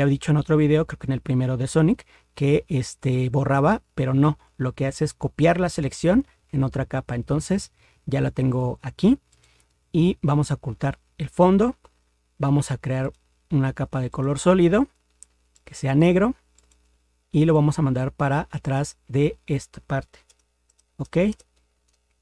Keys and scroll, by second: 20.3 ctrl++, 20.7 ctrl++.